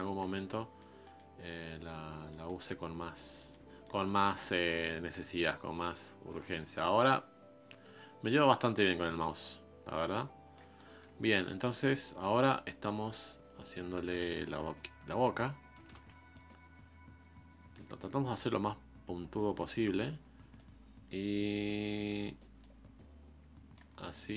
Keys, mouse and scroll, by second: 0.3 scroll down 2, 0.6-1.9 middle drag, 1.9-2.3 scroll up 1, 2.3 middle click, 2.7-3.2 scroll up 2, 3.4 middle click, 3.8-6.8 ctrl+drag, 8.8 middle click, 9.2-10.7 ctrl+drag, 10.7 scroll down 1, 10.7 middle click, 11.4-14.4 ctrl+drag, 14.6 middle click, 15.4 ctrl+click, 15.9 ctrl+z, 16.3-17.9 drag, 17.9 middle click, 18.4-19.7 drag, 19.7 middle click, 20.0-20.5 scroll up 1, 20.5-23.9 drag, 23.9 scroll down 2, 24.0-24.3 middle drag.